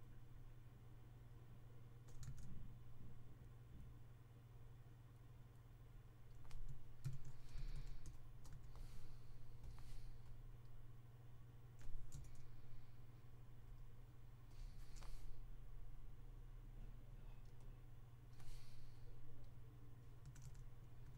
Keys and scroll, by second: 2.1 super+z, 6.9-8.4 typing, 20.1 1, 20.3 1, 20.9 2.